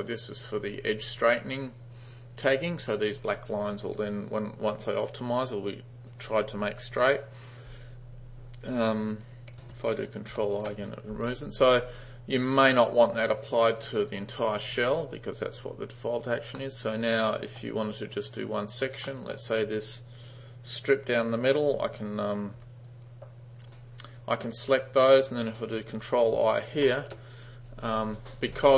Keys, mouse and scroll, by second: 10.4 ctrl+i, 16.6-17.6 middle drag, 19.1 middle click, 22.6 g, 22.9-23.7 drag, 26.9 ctrl+i.